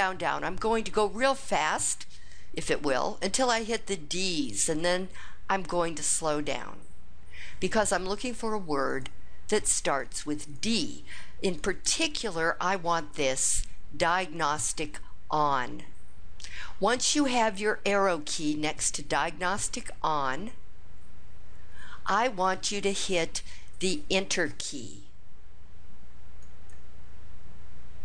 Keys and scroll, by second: 8.8 Up, 9.4 Up, 9.9 Up, 10.5 Up, 11.5 Down, 26.4 Return.